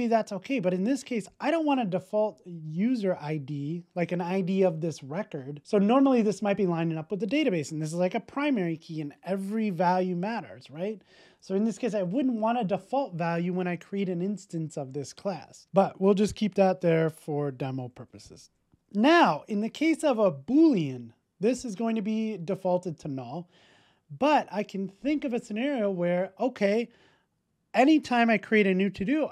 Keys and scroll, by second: 15.6 super+z.